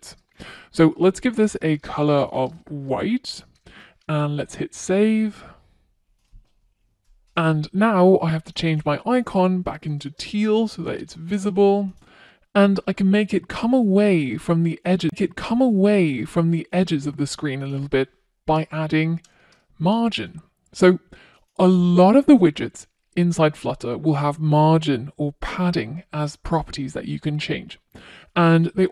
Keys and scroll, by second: 2.9 super+s, 9.7 super+s, 17.3 Return.